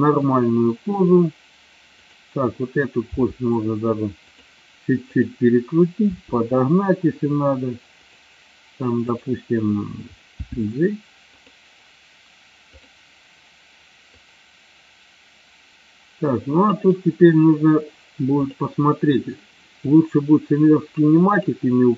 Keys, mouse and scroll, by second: 2.2 click, 3.2 r, 4.3 click, 6.2 r, 8.2 click, 10.6 g, 11.4 click, 12.8 click, 14.3-16.9 drag, 18.4 click, 19.8-21.5 drag.